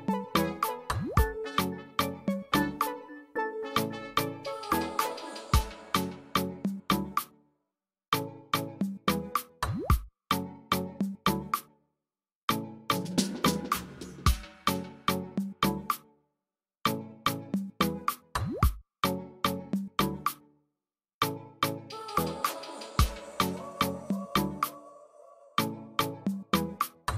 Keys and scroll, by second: 15.1-16.2 typing, 18.4-19.1 typing, 22.3 BackSpace, 23.4-24.2 typing, 25.2-26.8 typing.